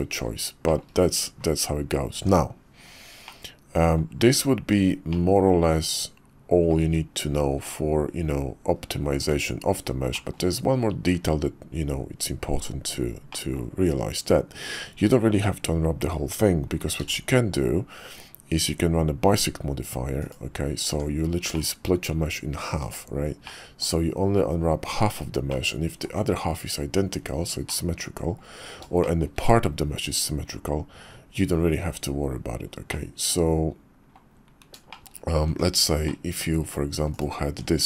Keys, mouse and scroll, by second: 0.7 shift+middle click, 2.1 Tab, 3.2 middle click, 4.5 KP_5, 5.1-6.7 middle drag, 6.8 `, 7.6 `, 8.7 KP_5, 9.2 Tab, 10.1 click, 13.3 middle click, 14.2 KP_5, 17.0 alt+x, 20.2-20.9 drag, 20.9 Tab, 21.6-22.7 middle drag, 22.8 Tab, 23.4 click, 25.5 click, 27.7 click, 29.0 shift+click, 32.9 click, 33.6 middle click, 34.9 shift+click, 35.5 Tab, 36.0-36.4 drag, 37.5 Tab.